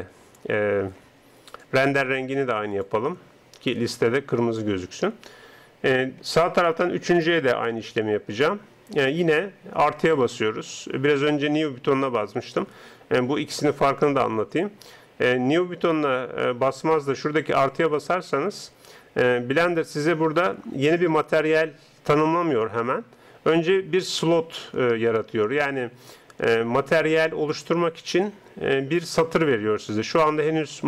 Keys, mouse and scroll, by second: 1.6-3.5 drag, 6.4-8.7 middle drag, 7.1-13.6 right drag, 17.8-19.9 drag, 19.6-27.5 middle drag, 27.5-30.8 drag.